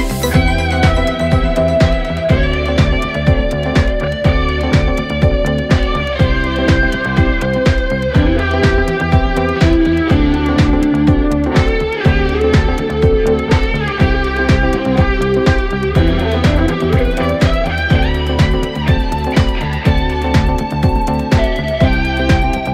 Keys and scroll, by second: 1.2 ctrl+z, 9.3 4, 15.0 2, 19.2 Escape, 19.6 F1, 21.1 F2.